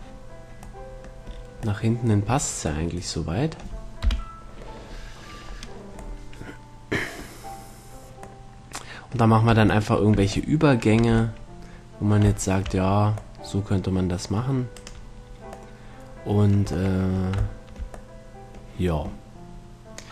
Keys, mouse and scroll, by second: 4.1 KP_1, 5.4-8.4 middle drag, 8.6-11.7 middle drag, 9.6 a, 10.2 Tab, 11.1 a, 14.8-16.6 right drag, 18.3-20.1 middle drag.